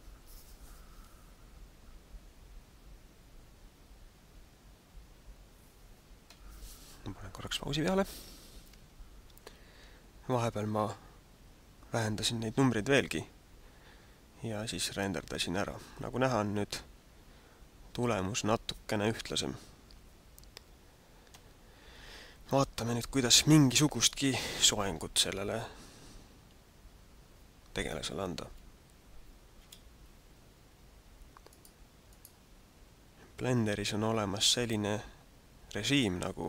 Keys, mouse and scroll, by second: 21.3 Escape, 28.6 KP_1, 29.8 KP_5, 31.4 right click, 32.0 right click, 36.0 click.